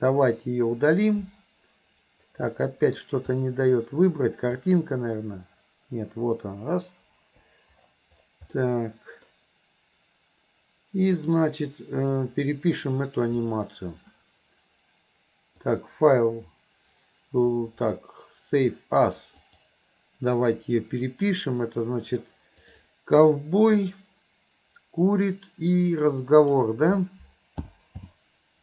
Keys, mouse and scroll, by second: 2.6 middle click, 4.6 click, 7.2 Delete, 8.6-9.3 middle drag, 11.2 click, 15.7-19.8 drag.